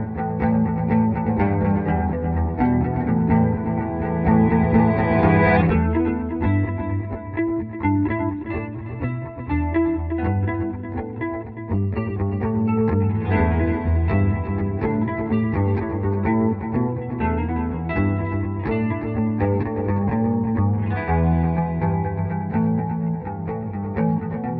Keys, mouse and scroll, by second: 5.0-7.8 drag, 7.8-10.7 drag, 10.7 click, 12.5 space, 12.9-16.3 drag, 16.3-18.3 drag, 19.0 click, 19.7 F12, 20.9 click, 21.4 Home, 21.8 Delete, 23.3 click, 24.1 F12.